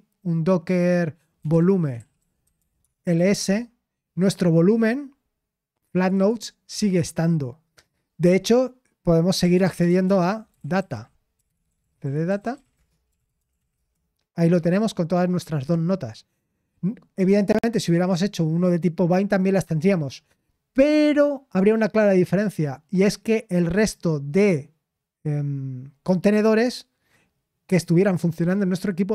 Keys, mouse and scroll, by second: 2.3-3.7 typing, 6.2-7.6 drag, 8.0 typing, 9.8-14.1 typing.